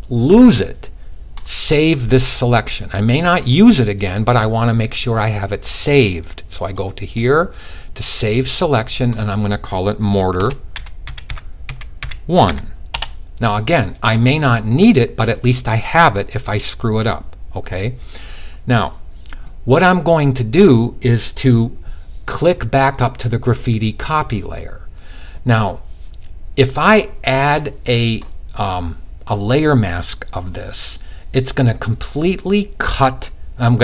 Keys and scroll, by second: 9.8-11.9 typing.